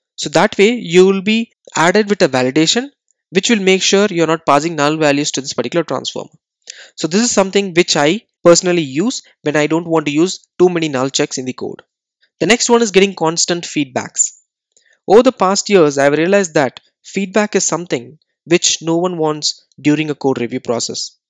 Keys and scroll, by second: 12.1 super+w.